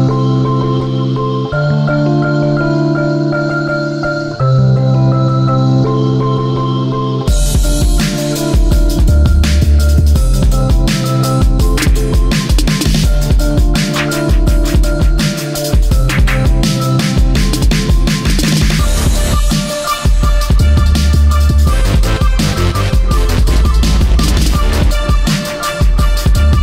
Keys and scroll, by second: 6.7 space, 7.2 ctrl+z, 7.6 space, 8.4 ctrl+z, 9.1 ctrl+z, 11.5 ctrl+z, 14.6 space, 16.1 space, 16.9 v, 19.4 v, 19.9 ctrl+[, 23.2 space, 26.1 space.